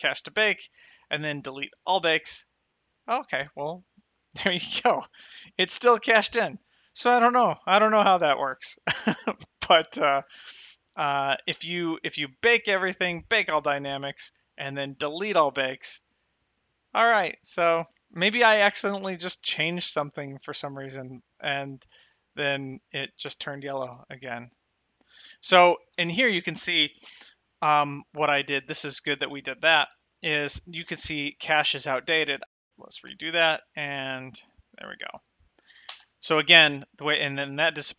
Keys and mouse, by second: 0.1 click, 2.0 click, 5.9 click, 6.3 space, 7.3 space, 8.4 shift+Left, 8.7 space, 11.8 space, 13.5 click, 15.5 click, 19.9 g, 20.7 click, 21.1 g, 21.6 right click, 22.3 space, 23.5 space, 24.7 space, 26.2 space, 33.0 shift+click, 33.1 Left, 33.3 space, 36.2 space.